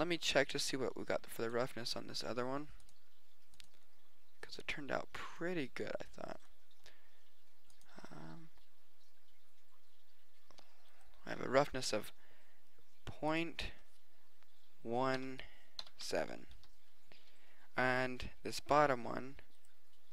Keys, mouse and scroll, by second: 13.4-15.3 drag, 17.9-19.9 drag.